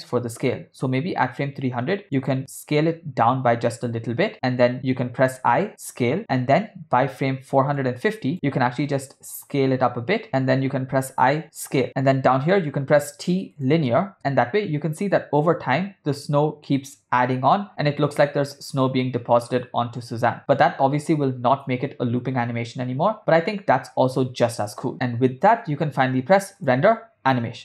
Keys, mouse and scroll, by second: 2.2 click, 2.8 s, 5.3 i, 8.0 click, 8.7 s, 11.1 i, 12.6 t, 14.2 space, 26.1 space, 26.6-27.6 drag.